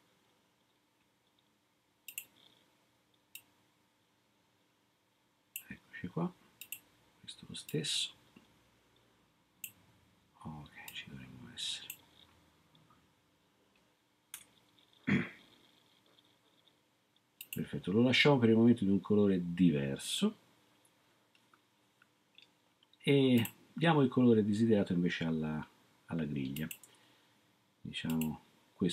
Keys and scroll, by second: 14.3 3.